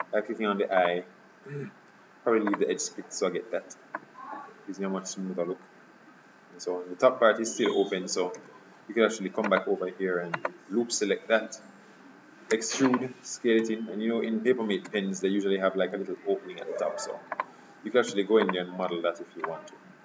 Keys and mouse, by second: 4.0 right click, 8.5 Tab, 9.6-12.1 right drag, 12.6 e, 13.7 s, 14.9 s, 18.2 e, 19.6-20.0 drag.